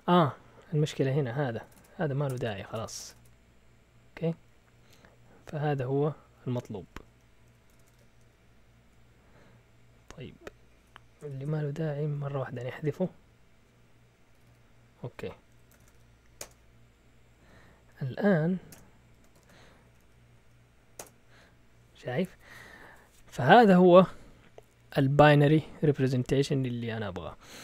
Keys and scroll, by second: 1.7-3.1 typing, 4.3-6.1 typing, 7.4 Escape, 7.4-8.3 typing, 11.0 BackSpace, 11.3 BackSpace, 12.0 Up, 12.2 Up, 12.4 Up, 12.5-13.1 typing, 14.3 typing, 15.5-17.7 typing, 18.1 Up, 18.7 Return, 19.3 ctrl+l, 19.6-20.4 typing, 21.0 Return.